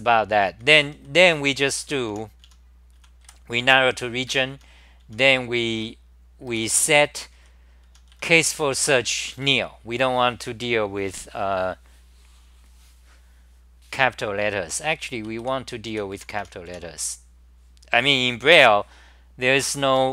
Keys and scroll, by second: 0.0-9.4 typing, 4.6 ctrl+g, 15.1 ctrl+g, 15.7-16.6 typing, 16.7 Home.